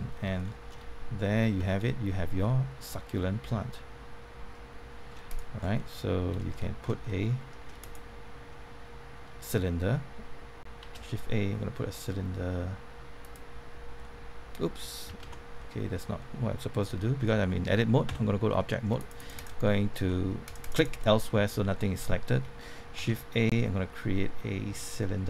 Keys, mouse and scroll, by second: 1.5 Tab, 1.8-5.0 middle drag, 5.2 click, 5.6 scroll down 1, 5.7-7.8 middle drag, 7.8 click, 13.2 click, 14.0-15.0 middle drag, 15.2 ctrl+z, 15.5 middle click, 17.0-18.0 scroll up 1, 18.0 Tab, 18.4 middle click, 18.9 click, 19.6 middle click, 20.4 click, 21.0 middle click, 22.9 shift+a.